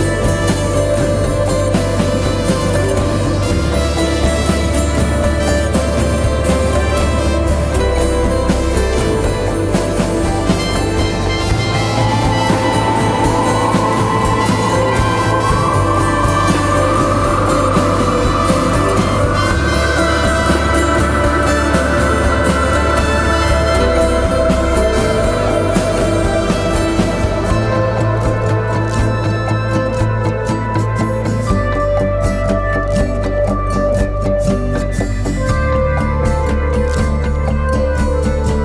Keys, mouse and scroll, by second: 0.9 ctrl+t, 7.0 Return, 9.7 ctrl+t, 11.2 ctrl+click, 21.9 Return, 24.7 ctrl+t, 28.6 Return, 31.3 ctrl+t, 32.3 alt+shift+click, 35.4 Return.